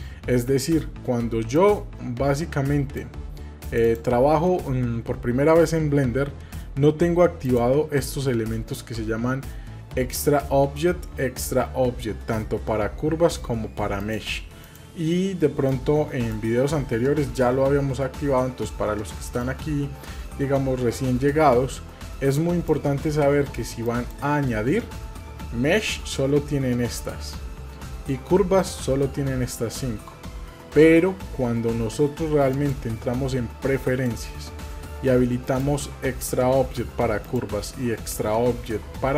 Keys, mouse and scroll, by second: 23.8-31.2 drag, 32.5-34.2 drag.